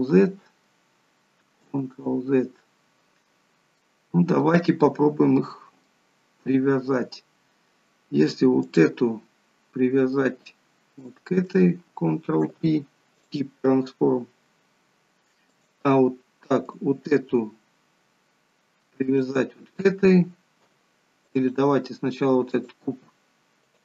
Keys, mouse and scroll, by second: 0.2 ctrl+z, 1.8 ctrl+z, 3.3-3.8 scroll up 3, 3.8 middle click, 4.7 scroll up 1, 5.4 middle click, 5.4 scroll up 1, 6.7 scroll down 1, 8.7 click, 11.0 shift+click, 12.5 ctrl+p, 15.5 click, 16.6 click, 19.1 shift+click, 21.4 click, 22.5 click.